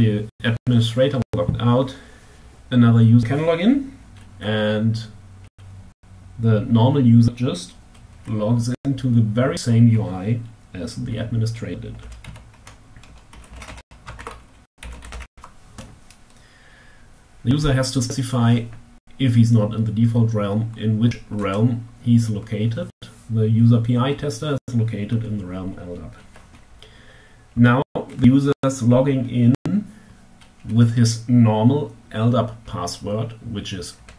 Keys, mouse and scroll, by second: 11.6-13.3 typing, 13.7 alt+q, 14.2 alt+l, 14.3 d, 14.4 a, 14.5 p, 21.0 Tab, 33.1-34.1 typing.